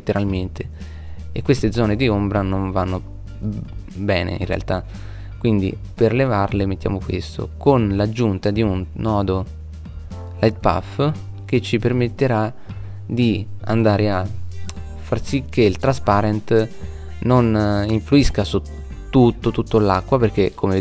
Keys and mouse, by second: 4.1 shift+a.